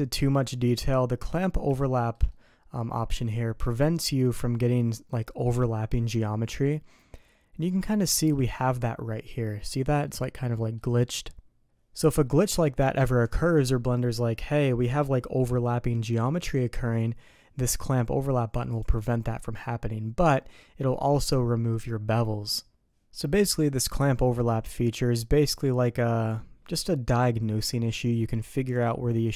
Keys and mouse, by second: 1.7-2.1 shift+middle drag, 2.2-3.2 middle drag, 6.6-7.7 middle drag, 8.1 shift+middle drag, 8.6 middle click, 9.4 middle drag, 10.0 middle click, 10.5 middle click, 18.7 click, 20.7 click, 23.2 click.